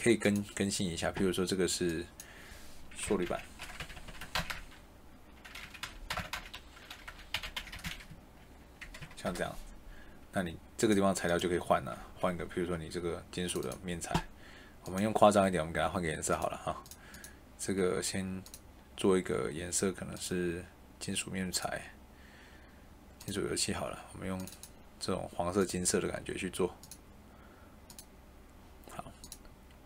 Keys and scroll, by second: 3.0-4.4 typing, 5.7-7.7 typing, 7.8 Escape, 8.0 Right, 8.9 BackSpace, 9.1 Return.